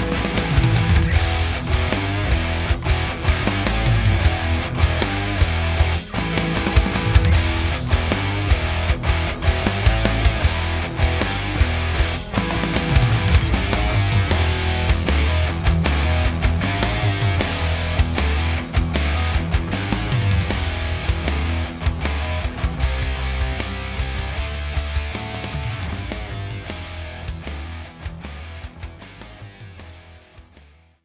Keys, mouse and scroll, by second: 0.1 Tab, 0.5 click, 0.8 click, 1.0 middle click, 1.2 scroll up 1, 1.5 click, 1.9 Tab, 2.1-2.5 scroll up 1, 2.8 alt+click, 3.6 f, 3.8-5.0 middle drag, 4.1-4.4 scroll down 1, 5.0 alt+click, 5.5 f, 5.6 click, 5.9-6.4 scroll down 1, 6.4 Tab, 6.4-8.6 middle drag, 6.8 r, 9.4 g, 10.0 click, 10.1-10.7 scroll, 10.3-13.7 shift+middle drag, 13.7 click, 14.4 g, 15.7 click, 15.9-17.8 middle drag, 16.3 scroll down 1, 17.5 Tab, 17.8 click, 18.3 click, 18.5-19.6 middle drag, 19.6 click, 19.9 s, 21.0 click, 21.6-22.1 scroll, 22.1 g, 23.2 click, 23.3 middle click, 23.9 click, 24.1 Tab, 24.8 click, 25.4 click, 25.7 e, 27.0 Tab, 27.2 click, 27.3-27.8 scroll down 1, 27.8 middle click, 28.0-29.0 drag, 29.7-31.0 shift+middle drag.